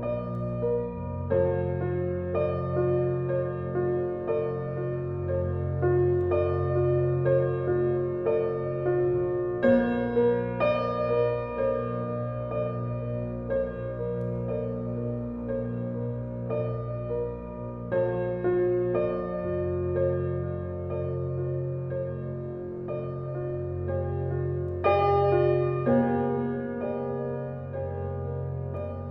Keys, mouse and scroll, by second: 1.1-3.1 alt+right drag, 3.1-6.5 drag, 6.5 x, 6.8 click, 7.6 x, 8.1 click, 9.5-10.9 drag, 11.1 click, 11.9 space, 12.1 click, 12.5 space, 13.5 click, 16.3 alt+right click, 17.3-24.0 drag, 24.0 ctrl+alt+z, 25.3 click, 28.7 click.